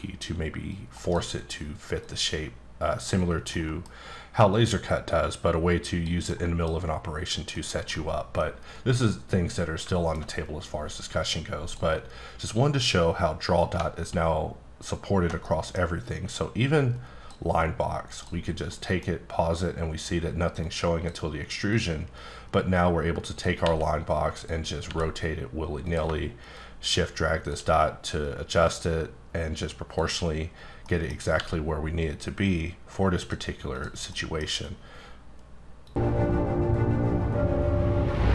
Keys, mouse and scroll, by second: 0.7 click, 1.0 right click, 2.3 click, 3.5 scroll down 1, 3.5 middle click, 4.5-6.1 drag, 6.3 middle click, 7.5 middle click, 8.7 middle click, 10.1 alt+scroll down 2, 11.6 click, 14.0-15.4 alt+scroll up 3, 15.4 middle click, 16.4 click, 17.8 click, 18.1 right click, 18.7 middle click, 20.6 click, 21.7 click, 23.6 r, 24.4 click, 24.9 r, 25.8-30.1 drag, 30.8 middle click, 31.3 g, 33.2 click, 33.7 click, 34.1 middle click.